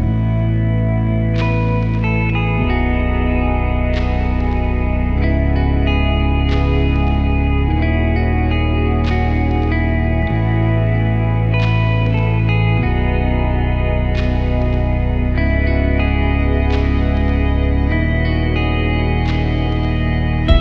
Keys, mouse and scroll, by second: 3.6 F6, 9.1 alt+F6, 10.5-11.8 alt+drag, 13.5 click, 14.9 click, 18.0 alt+F7, 18.8 alt+F7, 19.8 alt+F7, 20.5 alt+F7.